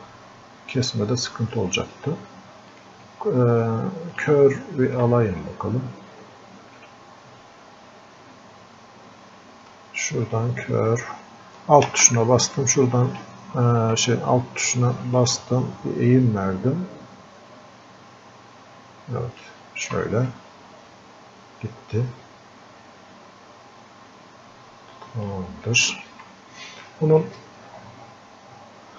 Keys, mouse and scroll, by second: 1.6 ctrl+Num_Lock, 1.6-2.8 drag, 10.0-11.9 ctrl+shift+drag, 11.9 ctrl+shift+space, 20.3-26.0 drag, 26.0-28.9 alt+drag.